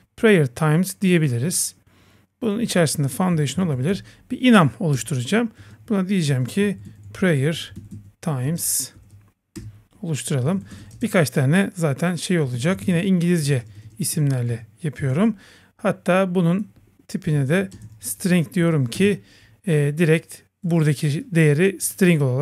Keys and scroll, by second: 3.0 Return, 5.0 Return, 9.6 Return, 18.9 Return.